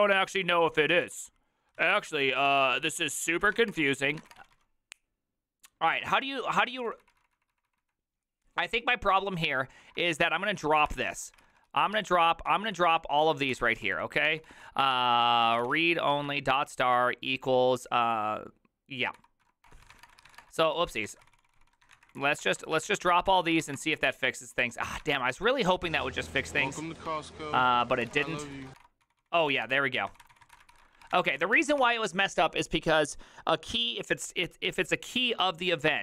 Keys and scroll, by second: 0.0-4.9 typing, 5.9 ctrl+u, 6.2-7.7 typing, 9.2-17.1 typing, 19.2-32.3 typing, 22.0 Up, 22.2 Left.